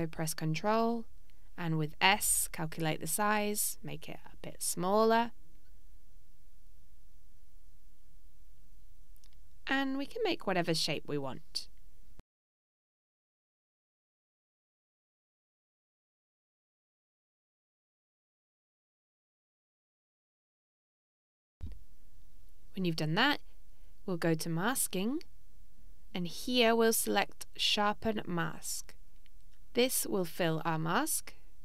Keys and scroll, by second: 3.2 s.